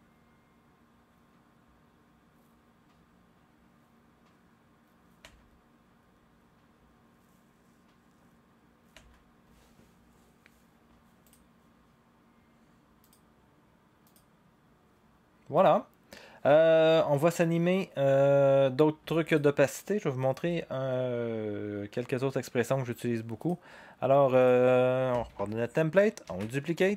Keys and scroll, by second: 5.2 0, 8.9 0, 26.2 ctrl+d.